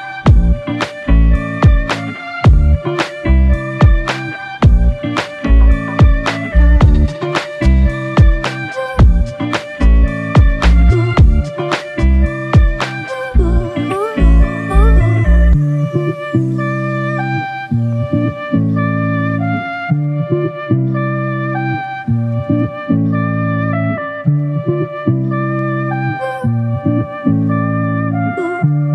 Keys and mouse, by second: 8.0 alt+click, 12.4 alt+click, 13.1-13.9 typing, 17.7 double click.